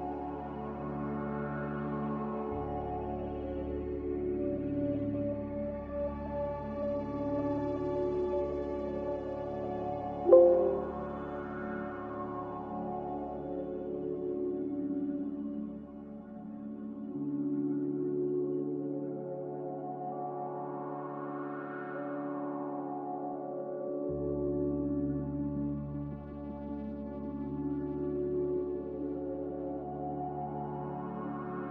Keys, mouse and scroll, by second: 5.8 m, 7.0 b, 7.8 Delete, 9.0 Delete, 12.2 Delete, 13.4 m.